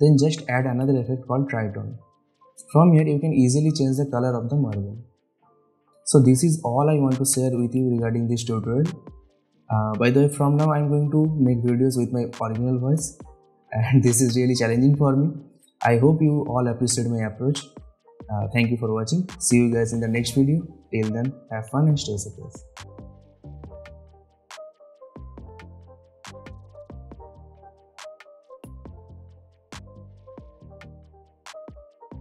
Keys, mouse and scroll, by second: 0.0-0.3 typing, 1.6-5.1 drag.